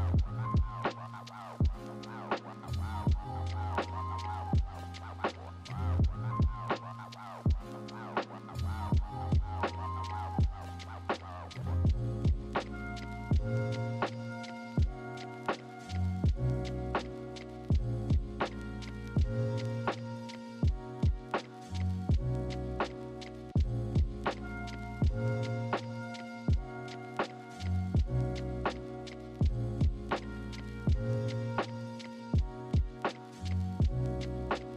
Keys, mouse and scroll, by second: 1.2 ctrl+=, 6.3 ctrl+-, 6.5 ctrl+=, 32.9 ctrl+=, 33.4 ctrl+=, 33.5 ctrl+-, 34.1 right click.